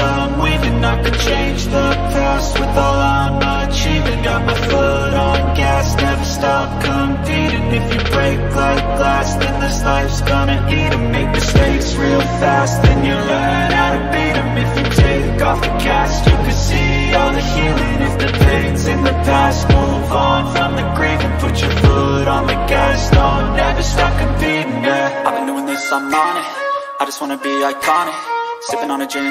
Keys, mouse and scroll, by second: 0.7 click, 1.1 click, 6.5 click, 7.3 click, 8.1 b, 8.5 v, 9.9 click, 10.6 b, 11.2 click, 11.5 ctrl+z, 13.5 click, 15.2 click, 15.6 ctrl+z, 16.0 click, 16.4 ctrl+z, 16.7 click, 17.5 click, 17.9 ctrl+z, 18.1 ctrl+z, 18.5 click, 19.0 ctrl+z, 19.4 click, 20.7 click, 21.9 click, 22.9 click, 23.8 ctrl+-, 24.3 ctrl+z, 24.6 ctrl+z, 25.0 ctrl+z, 25.3 ctrl+z, 25.7 ctrl+-, 27.8 click, 28.2 click, 28.7 click.